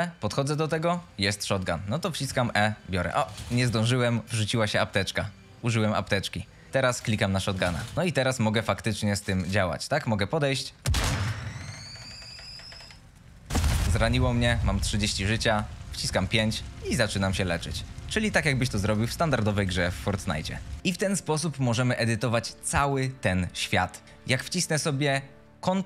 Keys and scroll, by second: 2.1 e, 6.7 e, 7.6 d, 7.9 s, 8.7 w, 16.0 5, 20.5-21.4 typing, 22.8 d, 23.7 w.